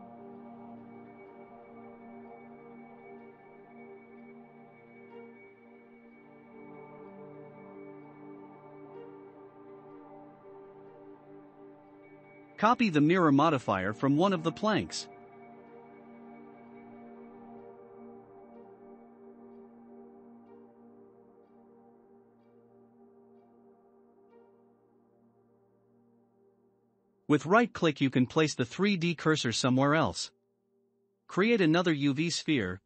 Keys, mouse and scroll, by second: 0.0-2.3 middle drag, 2.3 click, 4.6-5.9 middle drag, 5.9 scroll up 1, 6.5 scroll up 2, 6.5-7.3 middle drag, 7.3 click, 8.1 click, 8.9 click, 9.8-11.4 shift+middle drag, 11.4 shift+click, 13.0 ctrl+l, 15.4 click, 15.9 scroll down 5, 16.8 scroll up 2, 17.3-17.8 middle drag, 17.8 click, 18.3 shift+click, 20.7 shift+middle click, 21.5 click, 23.0 click, 23.6 scroll down 1, 24.2-27.1 shift+middle drag, 28.4 click, 28.9-29.7 middle drag, 29.7 shift+a.